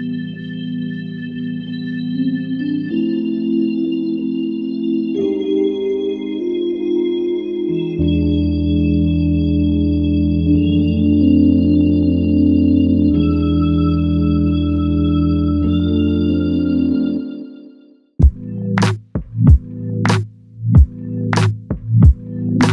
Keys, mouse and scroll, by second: 1.0 alt+click, 3.0 f, 5.0 double click, 6.5 alt+click, 7.6 double click, 8.5 alt+click, 9.8 double click, 10.3 alt+click, 11.2 alt+click, 11.6 double click, 12.8 alt+click, 16.7 f, 19.9 double click.